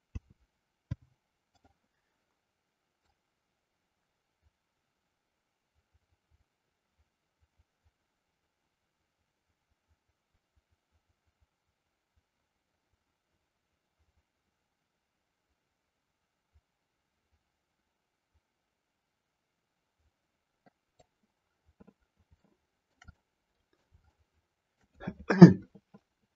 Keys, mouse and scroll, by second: 0.0 a, 0.7 i, 3.0-21.0 drag, 22.2-23.0 shift+middle drag, 23.1-23.9 middle drag, 24.1-24.9 shift+middle drag.